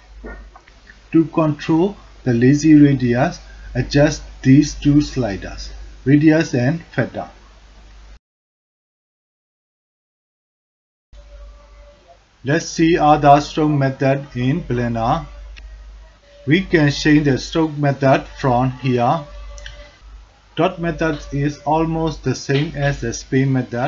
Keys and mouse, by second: 1.2-1.8 drag, 2.4-3.0 drag, 3.8-4.9 drag, 5.8-6.6 drag, 7.1-8.3 drag, 9.0-9.8 drag, 10.2 shift+drag, 11.1 alt+shift+click, 11.5 alt+click, 16.5-19.1 drag, 20.4 click, 21.7 ctrl+z, 22.8-23.8 drag.